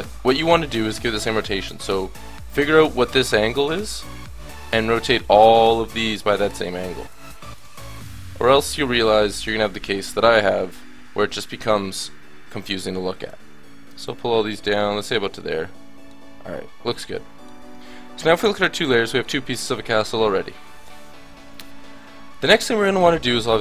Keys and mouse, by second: 4.1-6.2 middle drag, 7.0-8.7 drag, 9.9 click, 10.9-11.9 drag, 11.9 KP_1, 13.3-14.7 drag, 14.8 click, 15.0 Tab, 19.1-20.4 middle drag, 21.6-22.7 middle drag.